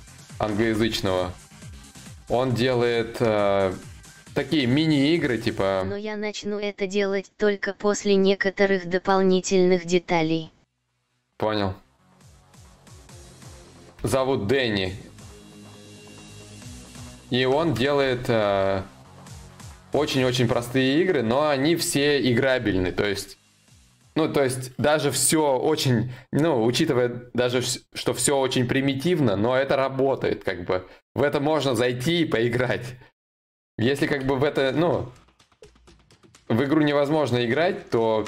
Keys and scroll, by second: 13.6 ctrl+z, 13.6 y.